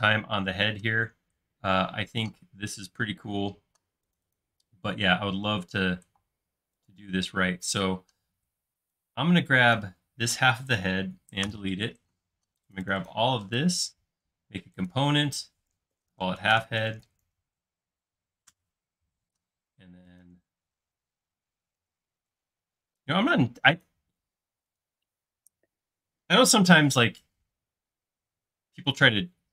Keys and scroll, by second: 3.3 typing, 5.1 typing, 6.3 typing, 11.5 BackSpace, 15.8-17.8 typing, 18.5 Return, 24.6 space.